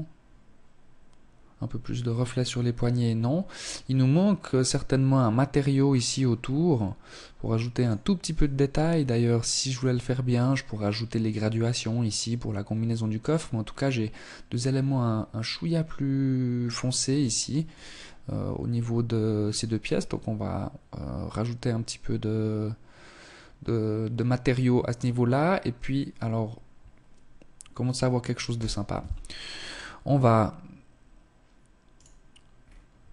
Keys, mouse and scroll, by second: 27.4 Escape, 28.5 click, 29.9 Escape, 30.9 right click, 31.5 scroll up 2, 32.2 Tab, 32.7 shift+middle click.